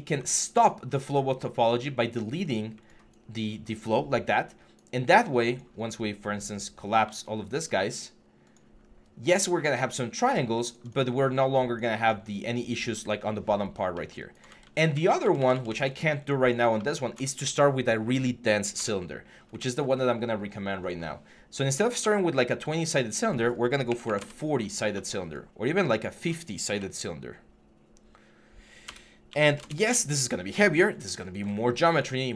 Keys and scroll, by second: 3.7 3, 5.6 3, 8.6 6, 9.6 3, 14.4 ctrl+z, 18.6 BackSpace, 23.7 4, 23.8 1, 26.5 8, 28.7-29.3 typing, 29.4 Return.